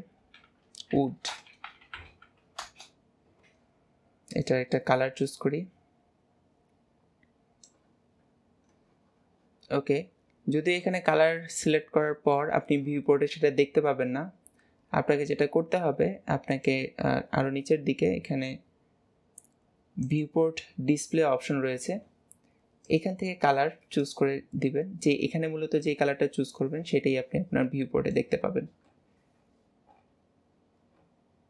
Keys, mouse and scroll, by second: 4.4 click, 8.1 scroll down 2, 8.7 scroll down 1, 9.3-9.8 scroll down 9, 11.4-13.4 shift+middle drag, 13.4 scroll down 2, 14.1 scroll down 8, 20.1-20.6 drag, 20.6 scroll down 4, 22.9 click, 28.9 scroll up 2, 29.9 scroll up 9, 30.0 scroll down 1, 31.0 scroll down 1, 31.0 scroll up 1, 31.1 scroll down 1, 31.2-31.4 scroll up 1.